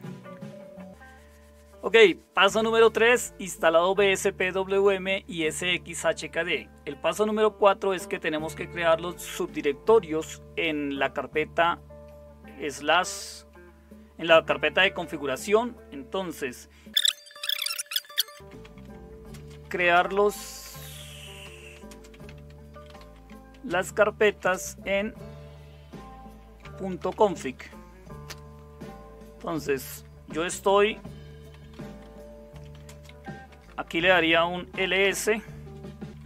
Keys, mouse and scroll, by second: 0.9 super+7, 17.8-25.0 typing, 26.6-30.4 typing, 31.5-36.2 typing.